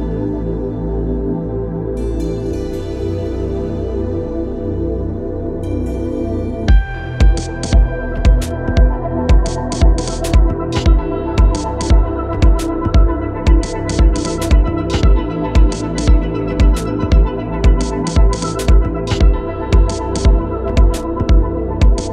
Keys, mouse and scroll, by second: 0.9 click, 3.0-8.2 drag, 8.2-12.6 drag, 12.6-17.1 drag, 17.1 shift+Up, 19.1 Return, 20.1 click.